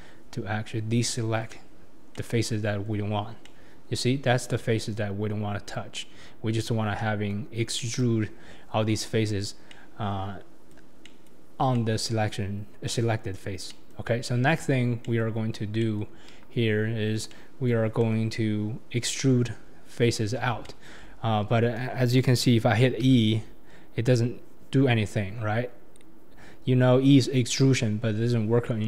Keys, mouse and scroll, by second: 2.1-3.1 middle drag, 3.1-3.4 scroll up 3, 3.4-6.0 middle drag, 6.0 scroll down 3, 6.1-6.8 scroll up 1, 6.8 scroll up 1, 7.0-9.6 middle drag, 9.6 scroll down 1, 9.7-14.9 middle drag, 14.9 scroll down 1, 15.0-15.7 middle drag, 15.7 scroll down 1, 15.8-16.3 middle drag, 16.3 KP_1, 16.8-17.3 scroll up 3, 17.3-18.0 middle drag, 18.0 KP_7, 20.2-20.6 scroll down 3, 20.6-21.1 shift+middle drag, 21.1 scroll up 2, 23.1 e.